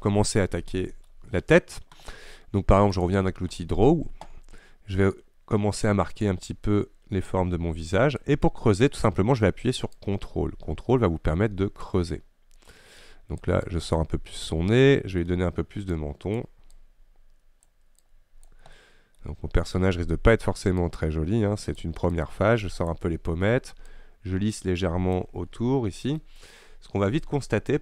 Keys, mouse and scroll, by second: 3.1-14.9 drag, 14.9-16.0 middle drag, 16.0-18.8 drag, 18.8 middle click, 19.3-20.9 scroll up 1, 20.9-25.6 drag, 25.6 scroll down 1, 25.6 middle click, 26.3-26.9 scroll up 1, 26.9 scroll up 1.